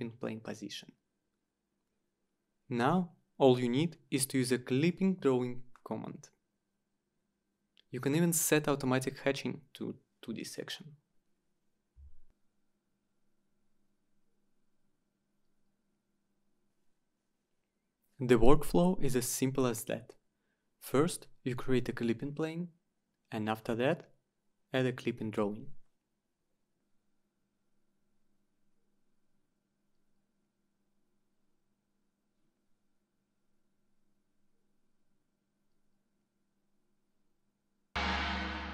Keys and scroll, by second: 13.4-17.8 typing, 24.7 Return.